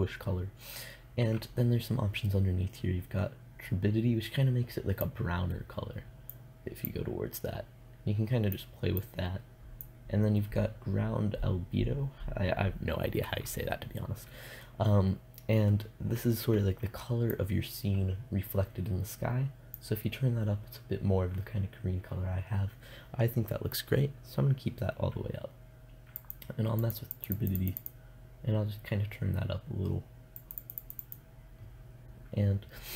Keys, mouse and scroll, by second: 4.5-8.3 drag, 9.2-10.3 drag, 16.7-18.6 drag, 25.6 click, 27.7 click, 28.9 click, 29.8 click.